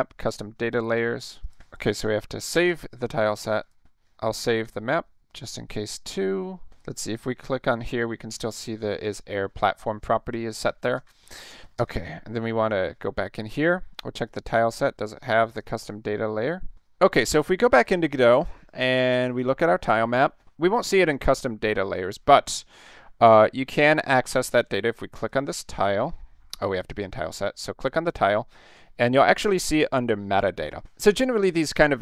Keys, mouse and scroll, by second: 0.2 click, 0.9 click, 1.4 click, 2.5 ctrl+s, 3.6 click, 4.4 ctrl+s, 5.4-5.9 middle drag, 6.9 click, 10.2-10.6 middle drag, 11.0 ctrl+s, 11.8 alt+Tab, 14.3 click, 15.5 click, 15.7 click, 17.8 alt+Tab, 19.4 click, 25.2 click, 26.9 click, 28.2 click.